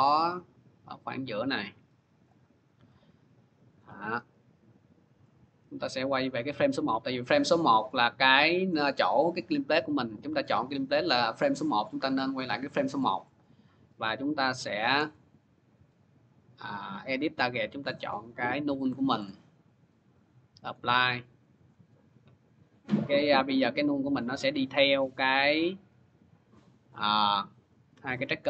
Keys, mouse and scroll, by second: 2.1 click, 3.6 click, 4.4 click, 6.7 click, 7.8 click, 9.3 click, 10.1 click, 13.4 click, 14.5 click, 14.9 click, 16.9 click, 18.0 click, 18.6 click, 19.1 click, 20.5 click, 21.5 click, 23.0 click, 26.8 click.